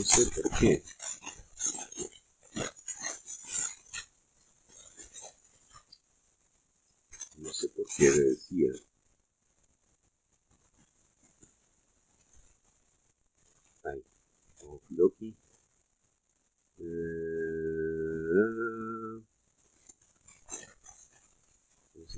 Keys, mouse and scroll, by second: 0.6 click, 5.9-6.4 scroll down 2, 7.2 shift+middle click, 10.2 click, 11.1 click, 11.7 click, 13.6 click, 16.2 click, 16.9 click.